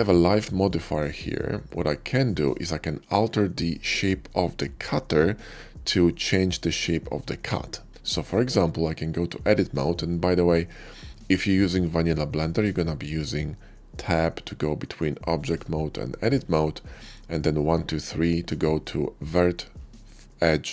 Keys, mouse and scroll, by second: 0.4 shift+click, 1.8-2.1 middle drag, 5.4-6.2 middle drag, 7.4-7.8 middle drag, 8.8 Tab, 9.4 Tab, 15.3 click.